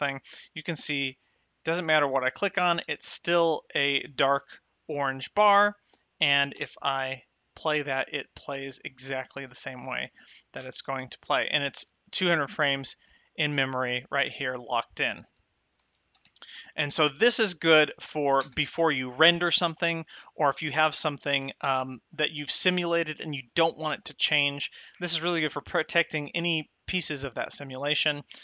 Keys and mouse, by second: 0.9 click, 6.7 space, 10.9 space, 16.1 shift+Left, 16.5 space, 18.8 space.